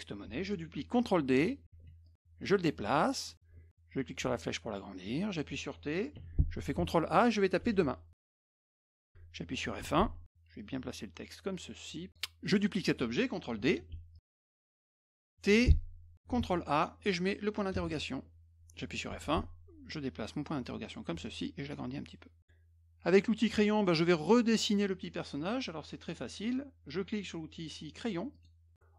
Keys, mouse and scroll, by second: 1.8 d, 2.1-3.3 drag, 4.2-5.3 drag, 6.8 ctrl+a, 7.4-9.0 typing, 9.8 F1, 10.6-12.1 drag, 14.1 click, 15.4 t, 16.4 ctrl+a, 17.8 shift+,, 19.9 click, 21.3-22.4 ctrl+shift+drag, 22.4-23.7 middle drag, 28.3 click.